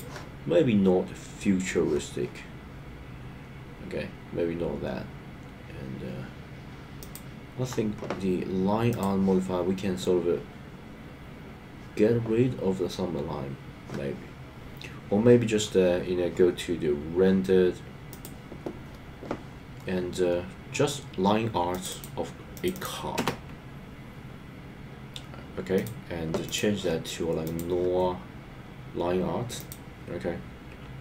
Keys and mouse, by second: 7.0 click, 21.7-25.8 drag, 26.5-27.6 drag.